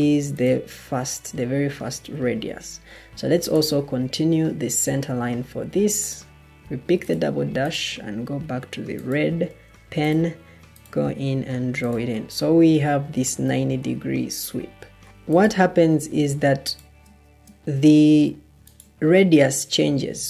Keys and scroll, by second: 9.5 Escape.